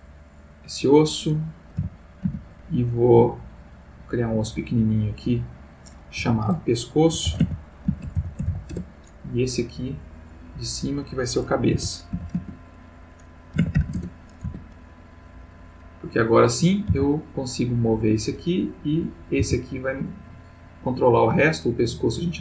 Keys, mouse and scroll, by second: 0.5 click, 1.8 g, 2.3 z, 4.0 click, 4.6 click, 6.2 F2, 7.2-8.5 typing, 10.2 click, 11.7 F2, 12.2 shift+c, 12.3 shift+a, 13.5 b, 13.7 c, 13.8 a, 13.9 Return, 14.4 Tab, 16.3 click, 16.9 r, 18.0 Escape, 18.7 click, 19.4 r, 20.8 Escape, 21.5-22.0 ctrl+middle drag, 22.2-22.4 ctrl+middle drag.